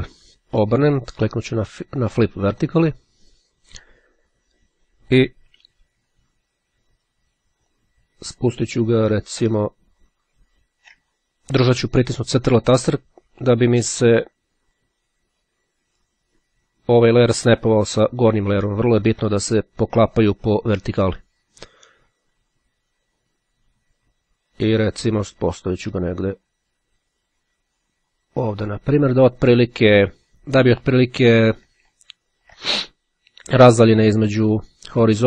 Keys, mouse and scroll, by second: 2.7 click, 7.2-30.9 drag, 32.1-32.6 ctrl+scroll up 2.